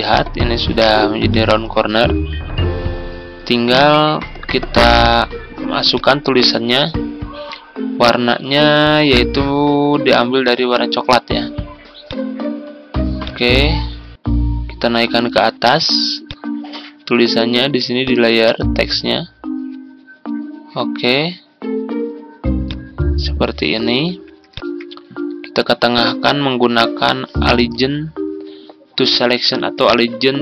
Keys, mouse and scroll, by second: 24.4 shift+click, 25.8-30.4 drag.